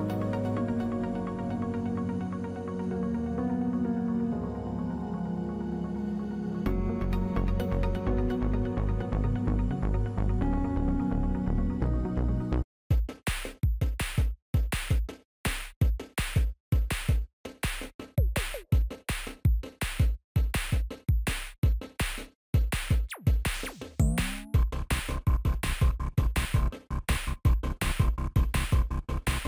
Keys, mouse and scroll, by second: 3.3 ctrl+=, 3.9 ctrl+=, 4.4 ctrl+-, 4.9 ctrl+-, 5.4 ctrl+=, 14.1 right click, 16.6 shift+click, 19.5 ctrl+a, 21.4 ctrl+a, 21.6 ctrl+d, 26.0-29.4 typing.